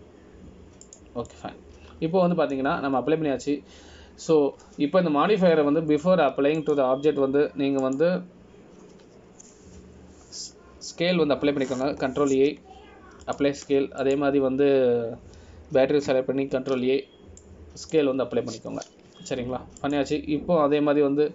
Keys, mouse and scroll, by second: 3.5 middle click, 5.1 scroll down 2, 8.8 click, 14.5 ctrl+a, 16.2 click, 18.7 ctrl+a.